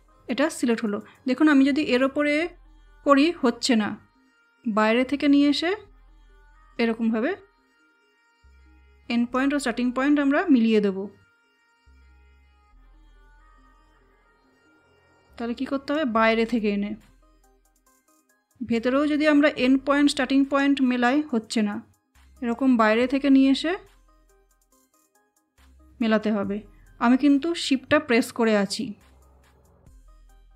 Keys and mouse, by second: 1.3-4.6 shift+drag, 4.6-11.9 shift+drag, 11.9-30.5 shift+drag.